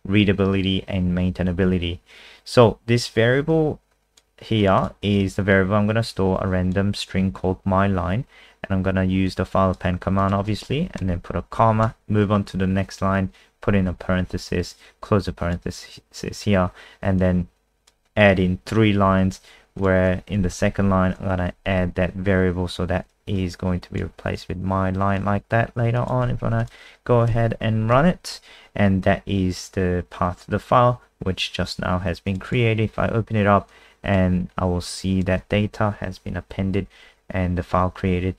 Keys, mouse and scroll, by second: 4.8 click, 6.1 click, 10.9 Right, 11.8 Down, 15.0 click, 20.6 ctrl+shift+Left, 20.7 ctrl+shift+Left, 23.4 super+click, 24.3 click, 26.0 click, 26.2 Escape, 26.6 click, 27.3 ctrl+s, 27.9 F5, 29.0 click, 32.5 click, 33.7 click.